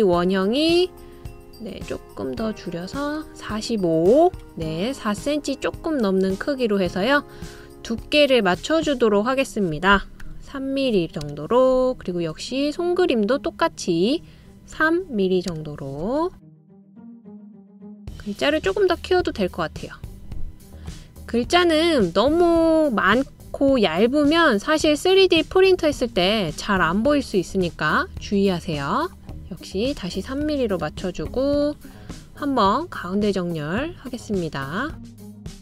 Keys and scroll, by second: 10.8 3, 11.8 Return, 15.4 3, 16.1 Return, 26.3 Left, 31.1 3, 31.5 Return.